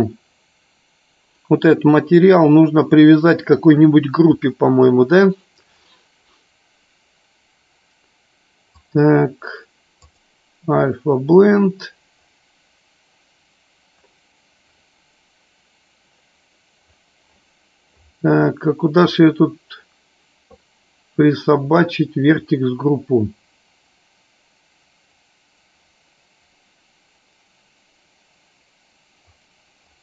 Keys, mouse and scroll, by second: 0.0 click, 8.8-11.7 drag.